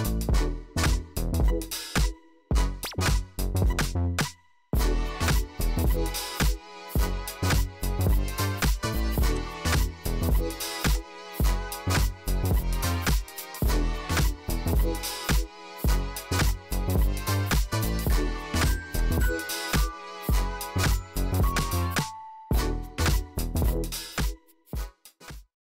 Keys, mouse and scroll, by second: 1.4 click, 6.5 click, 9.4 click, 11.0 click, 12.0-12.7 typing, 14.4 Return, 16.0-16.3 scroll, 17.7 click, 19.2 click.